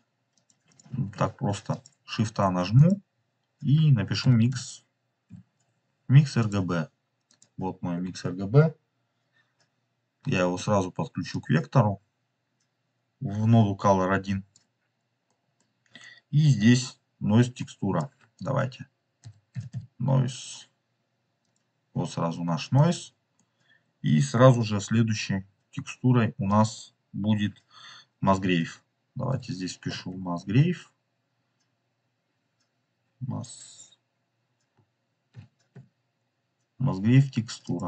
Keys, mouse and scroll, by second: 0.6 f, 0.9 right click, 1.6 click, 2.1 shift+a, 7.5-9.8 scroll up 3, 9.8-10.2 scroll up 1, 10.3 middle click, 11.2-12.8 drag, 14.6-15.2 scroll down 4, 15.2 middle click, 17.5-17.9 drag, 22.7 click, 23.3-24.5 middle drag, 25.4 scroll up 2, 26.4-28.2 drag, 35.2-37.8 drag.